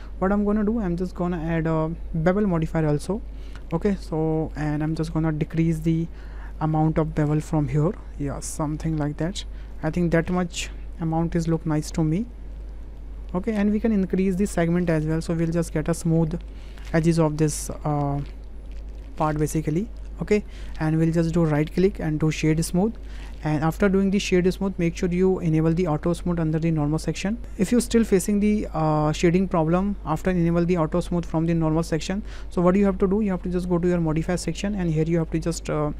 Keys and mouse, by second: 1.6-2.8 drag, 3.6 click, 4.3 shift+middle drag, 4.8 middle click, 7.1-10.0 drag, 11.4 click, 13.0 middle click, 15.2 click, 16.1-16.5 drag, 18.7-20.0 drag, 20.5 shift+middle click, 21.6-22.5 drag, 25.2 click, 26.2 click, 27.2 click, 30.4 click, 31.9 click, 34.2 click.